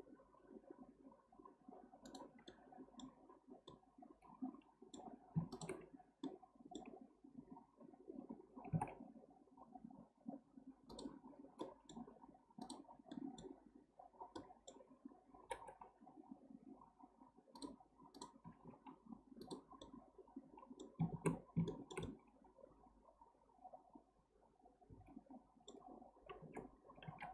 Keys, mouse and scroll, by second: 2.5 middle click, 3.3-3.7 scroll up 1, 3.7 middle click, 3.9-5.5 middle drag, 5.5 shift+click, 6.2-8.7 middle drag, 8.7 g, 11.6-12.6 middle drag, 12.6 click, 13.1 middle click, 14.2 scroll down 1, 14.4-15.4 middle drag, 15.4 g, 18.1 click, 18.4 g, 19.8-24.9 middle drag, 26.4 alt+z, 27.1 alt+z.